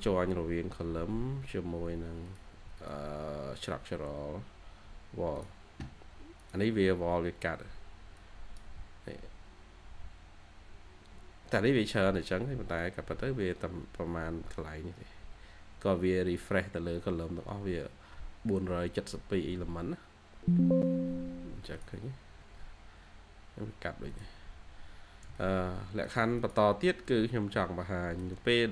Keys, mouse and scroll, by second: 1.3-2.3 scroll up 1, 6.9-8.2 scroll up 1, 22.2 scroll up 1, 24.3 scroll down 1, 25.2 shift+middle click, 26.6-26.9 scroll down 1, 26.9 middle click, 28.1 shift+scroll down 1, 28.4 middle click.